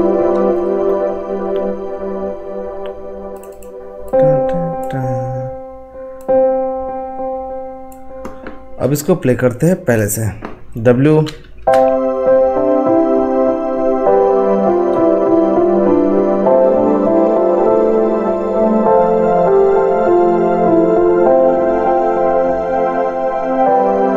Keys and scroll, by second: 11.2 w.